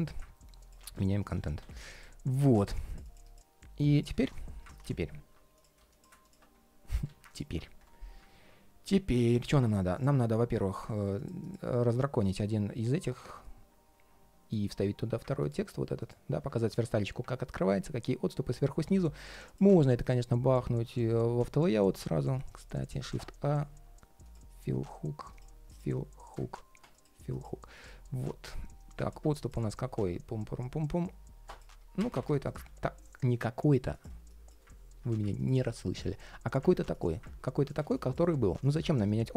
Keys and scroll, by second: 0.5 super+a, 0.7 super+c, 1.1 super+a, 2.2 shift+super+v, 4.6 super+z, 5.8 super+space, 16.0 super+c, 19.4 super+v, 34.9 super+v.